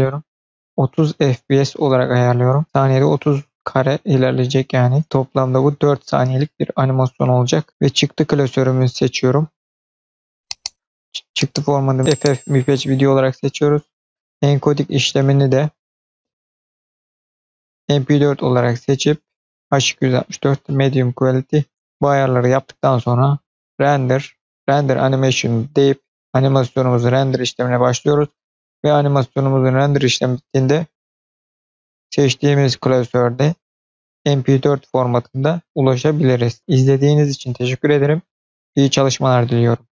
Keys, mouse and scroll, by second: 2.2-2.6 scroll down 4, 7.6-8.6 scroll down 2, 9.4 click, 10.5 click, 10.9-11.9 scroll down 3, 12.0-13.2 scroll down 2, 13.2-14.0 scroll down 1, 14.0 click, 14.4-15.0 scroll down 2, 15.0 click, 15.8 click, 16.5-17.7 drag, 18.0-19.3 scroll down 3, 21.7 scroll down 3, 21.9-22.3 scroll up 5, 23.6-26.0 drag.